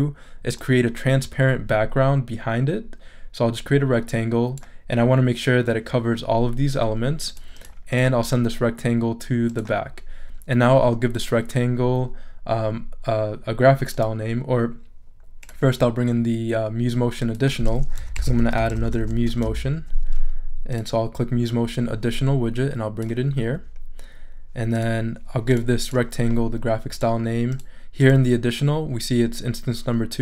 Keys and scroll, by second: 17.7-19.9 typing.